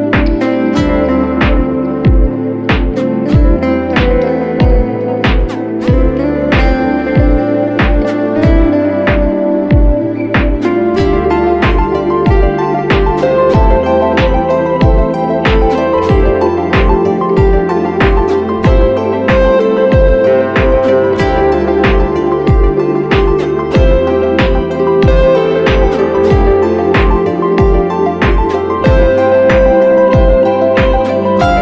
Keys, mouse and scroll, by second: 25.4 scroll down 1, 26.2 shift+click, 31.1 alt+click.